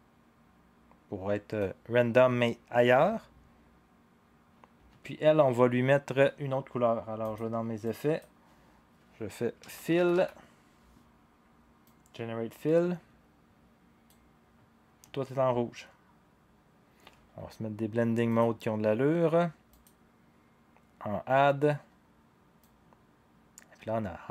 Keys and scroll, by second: 9.3-10.5 typing.